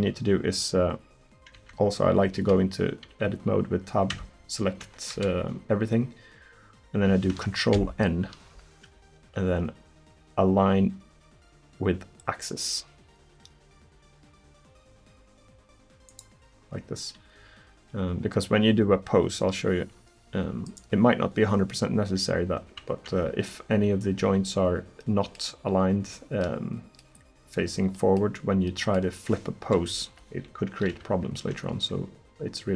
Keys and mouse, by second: 1.6 Tab, 2.4 a, 4.2 Tab, 4.9 Tab, 5.2 a, 7.8 ctrl+n, 25.0-26.9 middle drag, 29.7 KP_1.